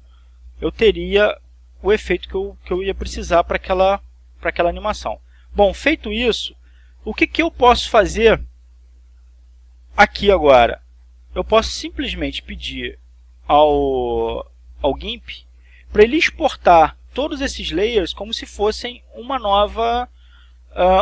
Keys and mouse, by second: 5.8 click, 6.5 click, 8.5 click, 9.4 click, 11.5-13.9 drag, 17.8-19.3 drag.